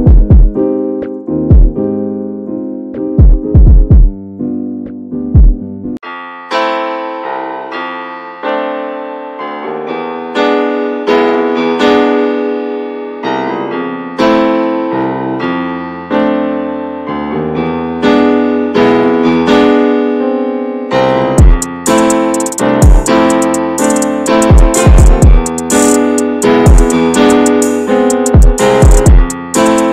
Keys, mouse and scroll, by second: 0.1 ctrl+s, 1.4-1.8 scroll up 2, 1.8 shift+middle click, 2.2 scroll up 1, 2.4 middle click, 3.2 scroll up 1, 3.7 click, 4.1 middle click, 4.3 scroll down 3, 4.4 ctrl+s, 4.6 middle click, 4.8 scroll up 1, 5.1 Tab, 5.3 middle click, 5.4 scroll up 1, 5.6 shift+middle click, 6.2 click, 6.5 middle click, 7.3 3, 7.6 click, 8.2 click, 9.1 2, 9.3 click, 9.8 click, 10.5 shift+click, 11.9 shift+d, 12.6-13.8 alt+middle drag, 13.8 e, 14.9 click, 17.5 2, 17.8 click, 18.5 x, 19.3 x, 20.9 Tab, 21.2 1, 21.9 Tab, 22.8 1, 23.1 alt+z, 23.4 click, 24.6-26.6 drag, 26.6 shift+middle click, 27.3-28.9 drag.